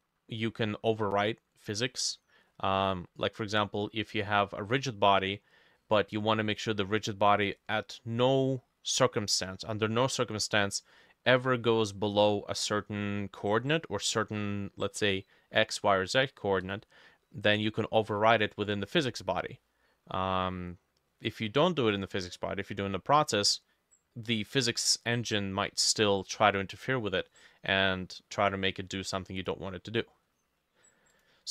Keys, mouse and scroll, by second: 0.4 middle click, 1.0 middle click, 1.7 middle click, 2.5 middle click, 3.3 middle click, 4.1 middle click, 5.8 middle click, 6.9 scroll down 1, 7.6 middle click, 8.6 middle click, 9.4 middle click, 9.8 middle click, 10.8 middle click, 11.4 middle click, 12.0 middle click, 12.5 middle click, 13.5 middle click, 19.6 middle click, 21.1 middle click, 21.8 middle click, 22.5 middle click, 22.9-23.3 scroll up 1, 23.3 middle click, 27.3 middle click, 30.2 middle click.